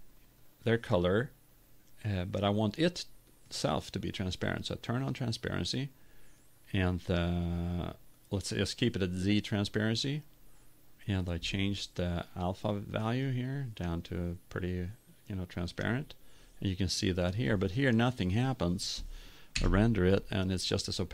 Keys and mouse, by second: 13.4 right click.